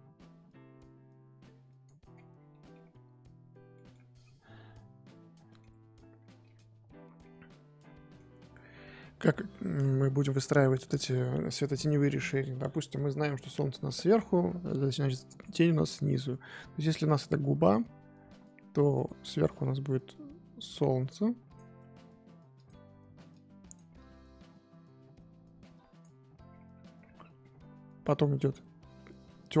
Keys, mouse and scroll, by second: 2.1-2.5 scroll down 10, 2.5 middle click, 2.8-3.3 scroll up 1, 3.3-3.7 scroll up 3, 3.7 middle click, 4.0-5.4 scroll up 6, 5.4 middle click, 5.7-6.2 scroll up 1, 6.2 scroll down 1, 6.4-7.4 middle drag, 7.4-7.8 scroll up 2, 7.8-13.0 middle drag, 13.0-14.2 scroll down 1, 14.2-15.0 scroll up 1, 15.0-15.5 scroll up 3, 15.5-16.7 scroll down 2, 17.7 click, 18.9-22.6 drag, 23.3-26.4 drag, 26.4-26.8 scroll down 10, 27.0-27.6 scroll up 14, 29.3-29.6 scroll down 2.